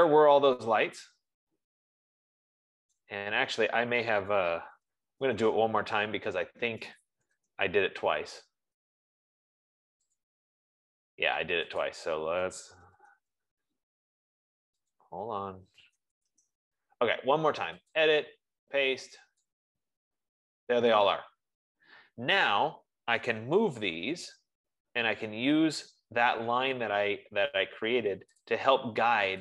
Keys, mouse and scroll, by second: 3.5 right click, 4.9-5.9 typing, 6.9-8.0 typing, 10.7 click, 12.3 click, 13.1 typing, 15.5 click, 16.2-17.0 typing, 18.6 click, 19.9 click, 23.8-24.9 typing, 29.0 typing.